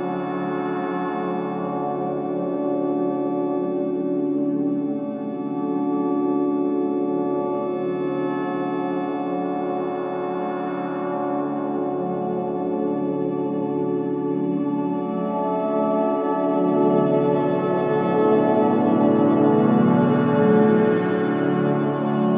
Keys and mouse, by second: 1.2 click, 3.0 click, 3.6-5.3 drag, 5.6-8.6 drag, 11.5 click, 13.1 r, 15.1 ctrl+z, 17.9 r.